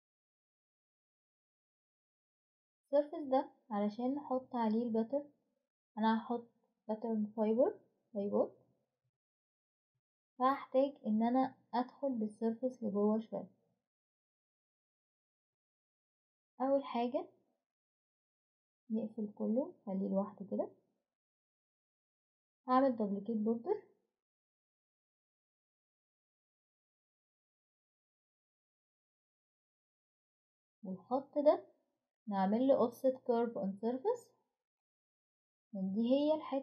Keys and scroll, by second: 19.5 typing, 22.2 ctrl+z, 30.6 typing.